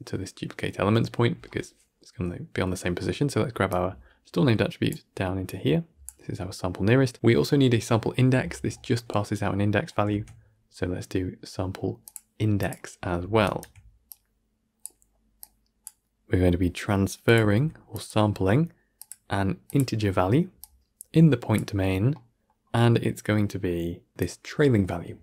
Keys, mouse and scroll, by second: 3.6-4.8 drag, 8.9 click, 14.7 click, 15.3-15.7 drag, 17.1-25.2 drag.